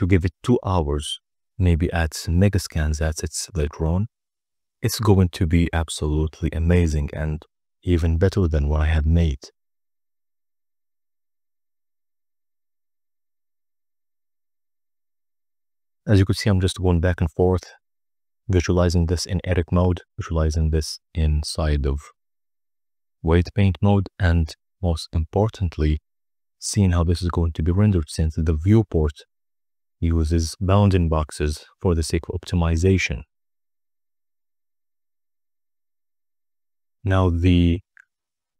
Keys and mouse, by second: 0.9 click, 2.3 click, 3.4 click, 4.7 Tab, 5.5-6.7 drag, 8.5-10.6 drag, 13.4 click, 13.9 click, 14.3 click, 14.7 click, 15.1 z, 21.8-22.6 drag, 25.1 click, 27.0-28.6 drag, 32.2 click.